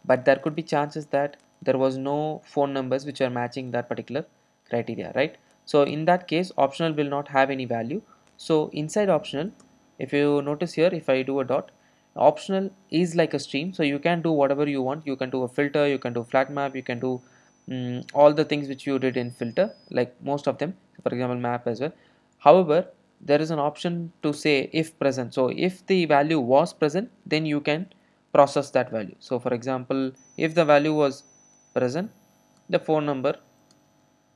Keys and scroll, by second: 24.4 Return.